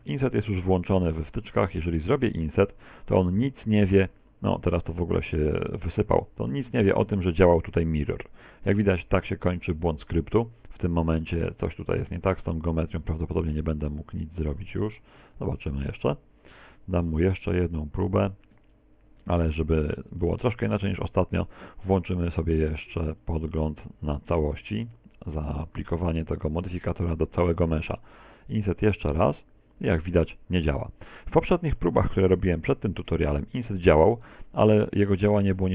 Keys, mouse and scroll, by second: 1.0 middle click, 2.9 t, 6.5 click, 14.4 right click, 14.8 Tab, 15.6 ctrl+z, 16.2 ctrl+z, 16.9 ctrl+z, 17.4 ctrl+z, 18.8 middle click, 19.5 right click, 20.3 shift+right click, 20.7 shift+right click, 21.1 shift+right click, 22.4 shift+middle click, 23.2 middle click, 26.1 click, 27.9 middle click, 32.0 click, 34.7 middle click.